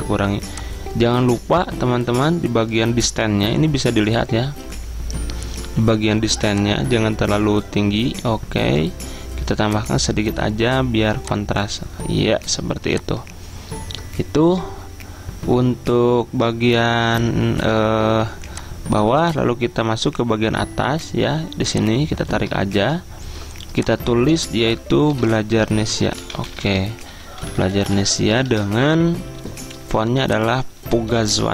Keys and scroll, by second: 25.2 ctrl+a, 25.6-28.5 typing.